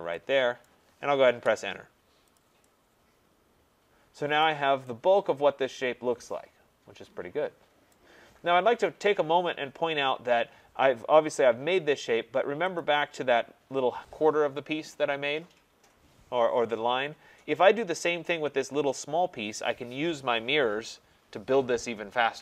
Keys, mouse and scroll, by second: 0.7 right click, 1.3 Return, 2.4 click, 4.4 right click, 7.9 right click, 8.4 scroll, 9.9-11.6 scroll, 12.6 scroll, 12.8 click.